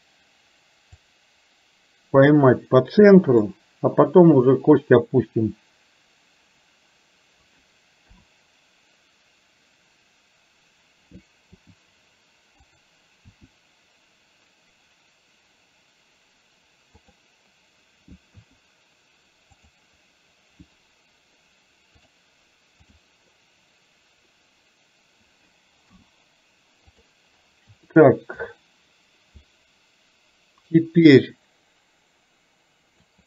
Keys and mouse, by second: 1.0 click, 1.9-3.5 drag, 8.1 KP_7, 11.7 r, 13.3 r, 18.4 KP_1, 19.7 click, 22.1 click, 25.9 i, 28.0 shift+middle click, 30.8 click, 31.1-33.1 drag.